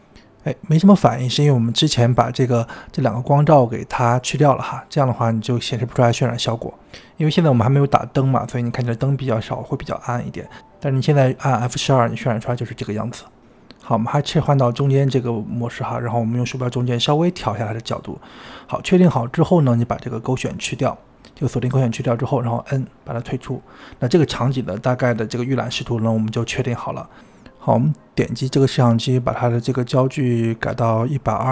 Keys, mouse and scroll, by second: 14.0-15.1 drag, 15.1 n, 15.7-16.5 shift+middle drag, 16.5 n, 17.0-20.3 middle drag, 20.3 click, 21.0 click, 22.5 n, 28.8-31.5 drag.